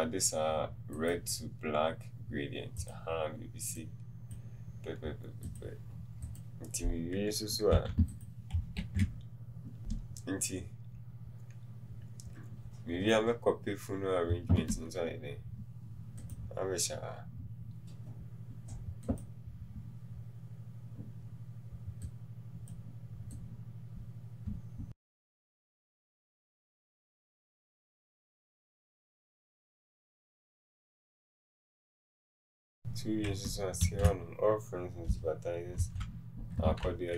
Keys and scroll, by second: 7.9 t, 24.9 ctrl+c, 26.9 ctrl+c, 28.4 t, 30.8 ctrl+shift+[, 31.0 t, 31.5 KP_0.